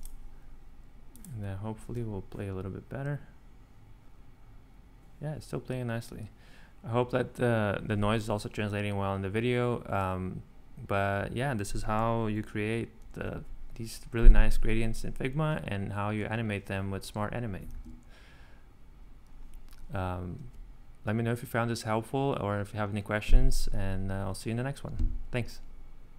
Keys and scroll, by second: 1.8 r, 17.7 ctrl+super+c.